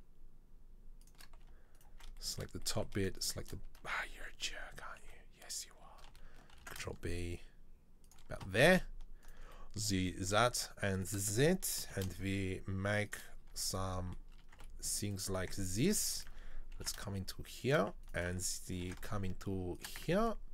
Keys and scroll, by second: 4.2 ctrl+z, 4.5 ctrl+z, 4.9 ctrl+z, 6.7 ctrl+b, 12.0 ctrl+b, 13.6 Tab, 14.6 space, 15.6 Tab, 16.9 ctrl+b, 18.9 ctrl+b, 20.1 Tab.